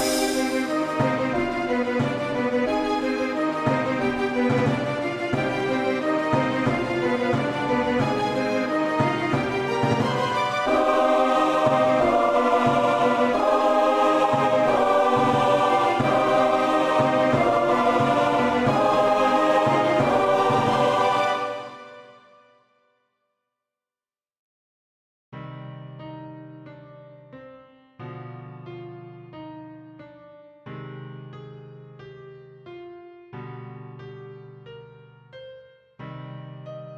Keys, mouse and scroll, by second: 5.1 q, 10.7 q, 14.0 click, 22.8 alt+click, 34.6 alt+click.